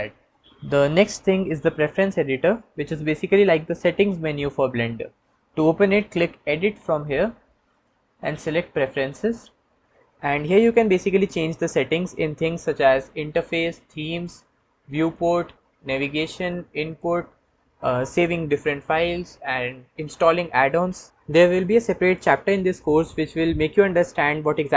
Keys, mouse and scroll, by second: 0.0 KP_5, 7.8-9.4 drag.